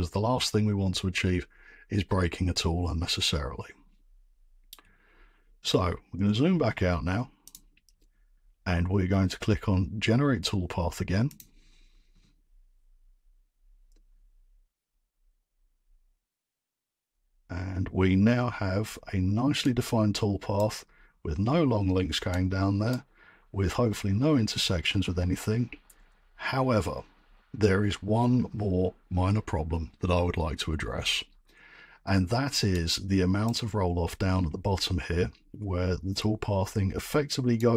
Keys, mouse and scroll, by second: 6.1-6.7 scroll, 7.5 click, 11.3 click, 18.7-19.8 middle drag, 18.7-19.1 scroll, 19.8 middle click, 20.0 middle drag, 20.2 middle drag, 20.5 right click, 22.3 scroll, 22.9 right click, 33.4 right click, 33.8-34.4 scroll.